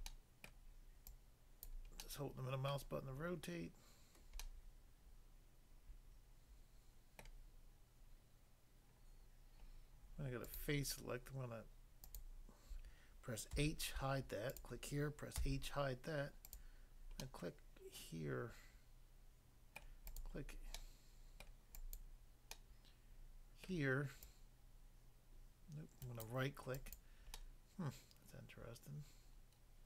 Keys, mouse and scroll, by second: 0.1 middle click, 0.5 middle click, 1.7 click, 2.0 middle click, 2.7 middle click, 4.4 middle click, 7.2 middle click, 10.4 click, 10.5 click, 12.1 click, 12.2 click, 13.5 h, 14.5 click, 14.6 click, 15.3 h, 16.5 click, 17.3 middle click, 19.8 middle click, 20.1 click, 20.2 click, 20.8 middle click, 21.5 middle click, 21.7 click, 21.9 click, 23.3 middle click, 23.6 middle click, 24.3 click, 26.1 right click, 26.3 click, 26.3 right click, 27.4 middle click.